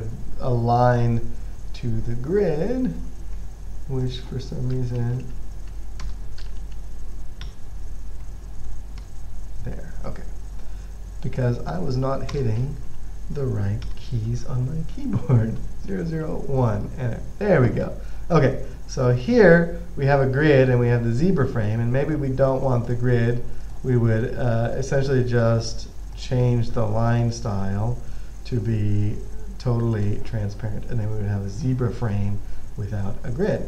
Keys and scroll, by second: 5.3-8.9 typing, 9.3 Return, 11.7-14.6 typing, 15.9-18.7 typing.